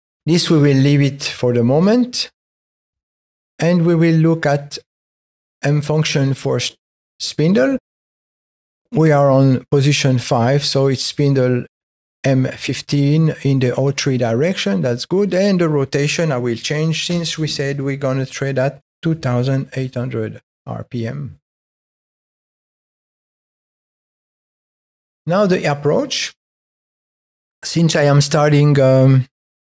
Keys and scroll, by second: 0.1 Up, 1.6 Down, 3.8 Up, 5.1 Down, 6.9 Up, 7.6 Down, 17.0 space.